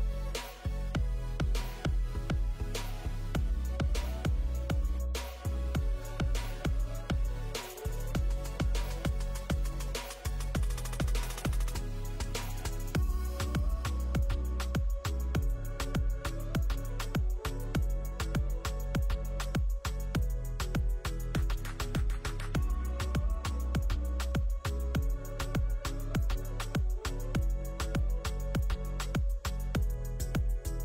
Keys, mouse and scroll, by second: 1.4 click, 1.5 g, 13.4 click, 13.7 click.